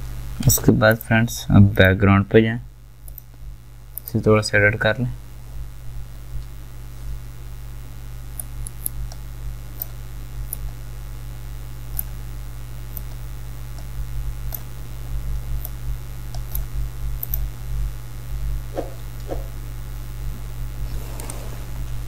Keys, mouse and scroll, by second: 0.5 v, 8.7-17.3 drag.